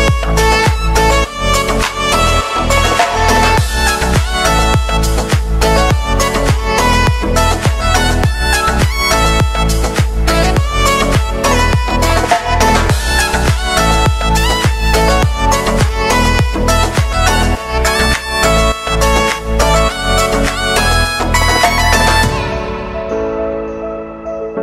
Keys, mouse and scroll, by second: 0.5 space, 3.4 space, 4.1-5.5 drag, 8.6 ctrl+i, 9.3 click, 9.7 Return, 10.9-14.4 drag, 14.7 click, 15.6 space, 17.7-24.6 drag.